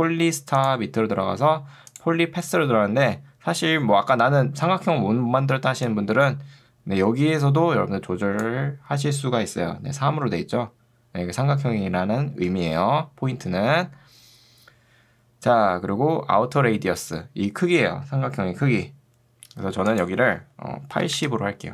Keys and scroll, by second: 4.1 ctrl+2, 12.5 Escape, 21.1 0, 21.3 Return.